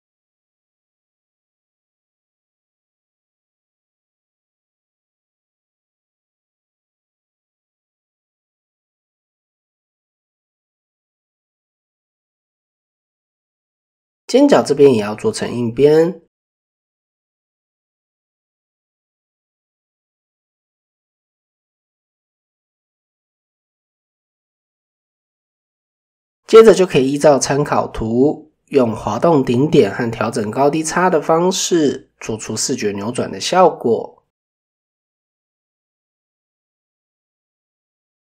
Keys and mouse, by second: 1.2 middle click, 6.9-7.9 middle drag, 10.1 Tab, 10.9 shift+middle click, 13.9-15.8 drag, 16.0 Tab, 16.5-18.5 middle drag, 20.3 middle drag, 22.0 click, 22.2 Tab, 23.4 click, 23.8 middle click, 24.8 shift+middle click, 25.4 shift+middle click, 27.1 click, 30.1 g, 31.0 middle click, 32.2 click, 33.3-34.5 middle drag, 38.1 click.